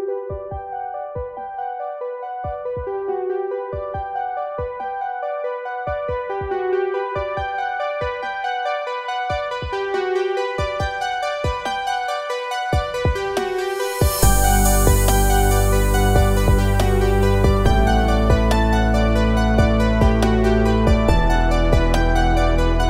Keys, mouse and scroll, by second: 3.0 click, 6.0-10.9 drag, 10.9-18.8 drag, 22.5 click.